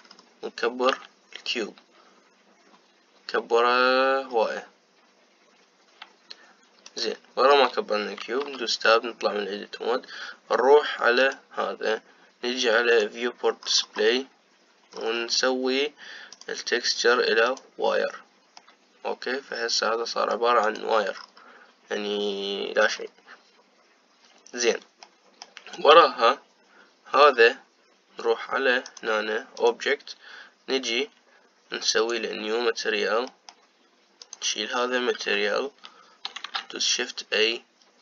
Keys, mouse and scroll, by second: 0.5-1.7 scroll down 4, 1.7 s, 9.1 Tab, 11.9 click, 13.6 click, 14.3-15.6 scroll down 7, 15.6-16.9 scroll down 3, 17.0-19.3 drag, 19.3-21.3 middle drag, 21.3 click, 21.8-23.0 scroll down 5, 23.0-23.5 scroll down 1, 23.5-25.0 scroll up 5, 25.8-27.9 middle drag, 27.9 click, 29.5-32.6 drag, 33.1 click, 34.0 middle click, 34.9 click, 36.2 Delete, 37.1 shift+a.